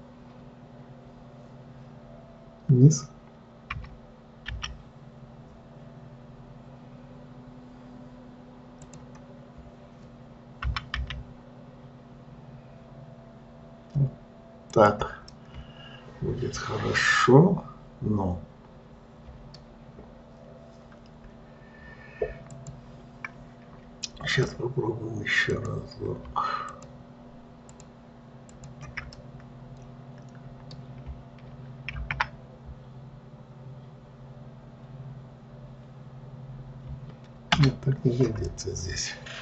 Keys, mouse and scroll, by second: 15.6-18.6 middle drag, 22.9 click, 24.7-26.0 drag, 27.0 shift+click, 28.0 shift+click, 28.9 shift+click, 29.5-32.3 middle drag, 32.3 alt+v, 38.8-39.4 middle drag.